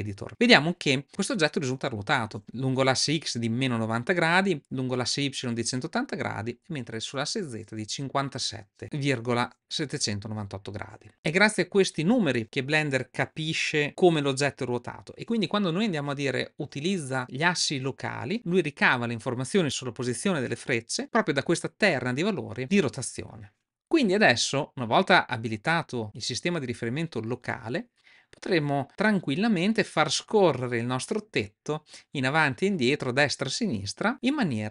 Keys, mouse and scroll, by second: 29.3 click, 32.4 click.